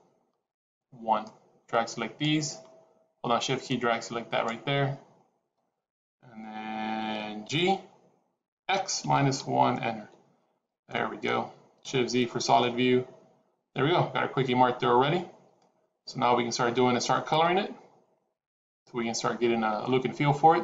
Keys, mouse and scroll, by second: 1.1 click, 3.3 shift+click, 7.3 g, 10.6 scroll down 1, 10.7 middle click, 12.1 shift+z, 12.5 middle click.